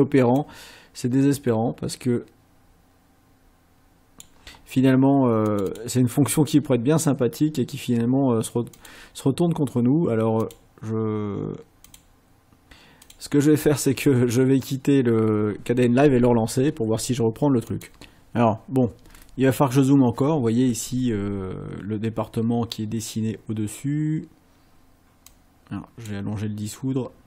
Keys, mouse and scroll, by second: 0.4-4.4 drag, 5.5 click, 8.8 click, 10.4 click, 11.9 click, 13.0 click, 17.7 click, 25.4 click.